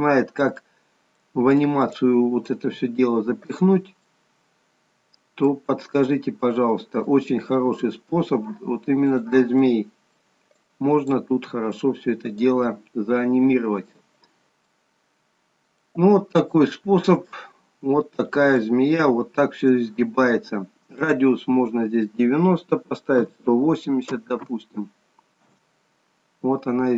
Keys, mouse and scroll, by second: 1.4 middle click, 2.2 click, 3.0 g, 4.3 middle click, 7.4 click, 8.0 g, 9.9 middle click, 10.9 click, 11.6 g, 12.8 middle click, 14.4 scroll up 4, 14.8 middle click, 14.8 scroll down 2, 16.7 shift+middle click, 17.5 middle click, 18.8 shift+middle click, 21.2 click.